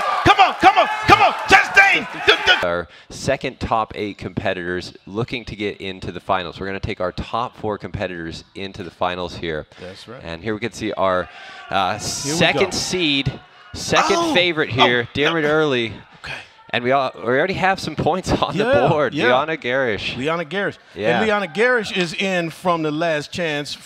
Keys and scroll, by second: 7.7 shift+Delete, 7.9 ctrl+Page_Up, 9.3 ctrl+Left, 9.5 ctrl+Up, 9.9 Left, 10.1 Left, 10.3 Right, 10.6 Down, 10.7 Right, 11.0 Return, 12.3 Up, 12.3 ctrl+Left, 12.5 ctrl+Down, 12.8 Right, 13.0 Right, 13.2 ctrl+shift+Up, 13.9 ctrl+d, 14.5 ctrl+shift+Right, 14.8 shift+Left, 15.1 shift+Left, 15.7 ctrl+r, 22.2 ctrl+Home, 22.5 ctrl+Page_Up, 22.7 ctrl+Page_Up.